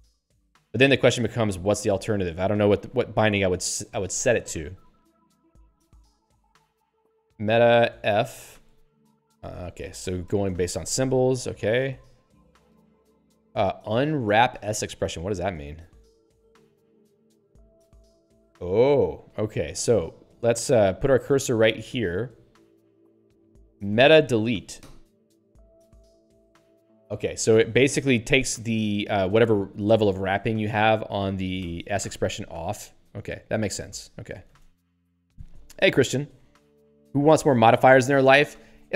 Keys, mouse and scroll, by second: 1.0 scroll down 3, 6.3 click, 6.3 click, 7.9 alt+shift+f, 14.6 click, 15.6 middle click, 19.1 click, 19.2 click, 19.3 q, 21.4 click, 24.8 alt+Delete, 26.4 ctrl+/, 31.6 alt+Delete, 33.5 ctrl+/, 34.5 ctrl+s.